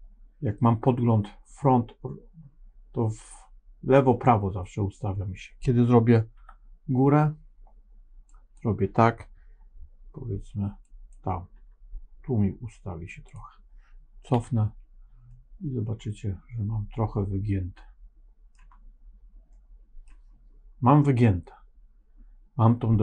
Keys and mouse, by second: 6.3 KP_7, 8.2 click, 10.9 click, 11.4 g, 14.2 KP_1, 15.2-18.5 middle drag, 19.5 middle click.